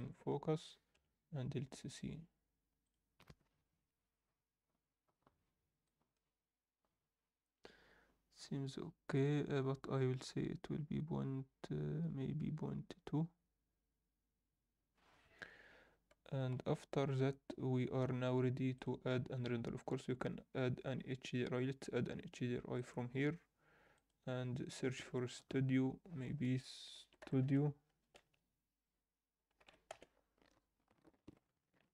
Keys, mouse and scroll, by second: 0.9 KP_0, 3.7 click, 9.1 click, 16.7 ctrl+s, 18.7-19.6 drag, 22.7-31.9 drag.